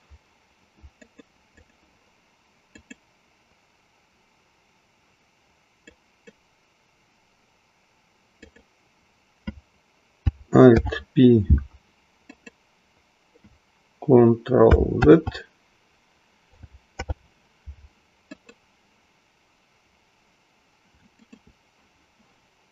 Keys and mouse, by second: 1.1 click, 2.7-3.7 drag, 5.9 click, 8.3 click, 11.6 alt+p, 15.1 ctrl+z, 18.2 alt+p, 21.1 shift+click.